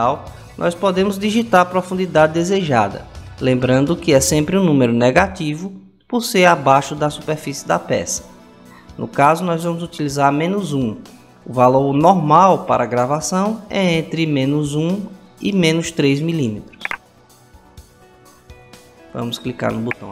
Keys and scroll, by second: 4.0 -, 5.5 1.